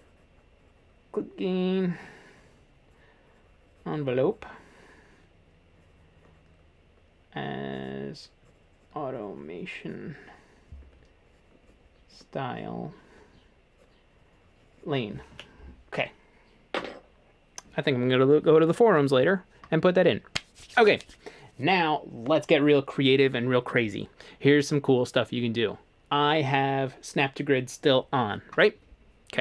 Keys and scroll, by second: 19.2 a.